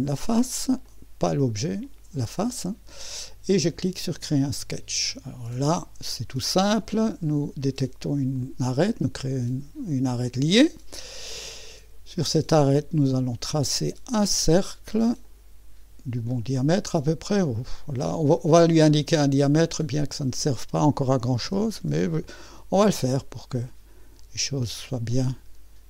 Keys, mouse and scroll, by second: 0.0 click, 0.9 click, 1.9 click, 4.0 click, 5.1-6.2 right drag, 8.3 click, 10.3 click, 11.3-12.7 scroll up 1, 12.7-13.0 scroll up 1, 13.0 click, 15.2 click, 16.2 click, 16.7 middle click, 18.4 click, 19.6 click, 21.2-22.0 typing, 23.5-25.8 drag.